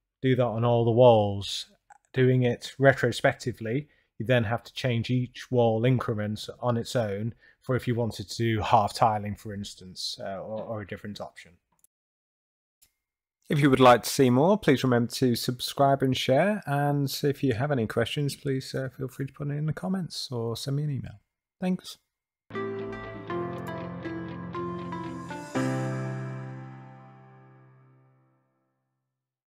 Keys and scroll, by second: 2.2 d, 4.5 s, 6.6 a.